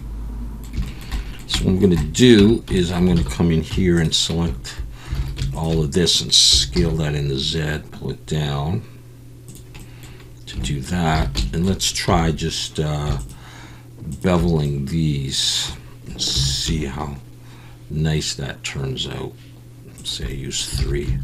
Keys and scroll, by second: 2.4 Tab, 3.2 alt+a, 3.7 3, 4.7 Tab, 5.2 alt+a, 5.2 alt+a, 5.7 alt+a, 6.5 s, 8.2 z, 11.2 alt+a, 12.1 2, 16.3 ctrl+b, 20.8 alt+a.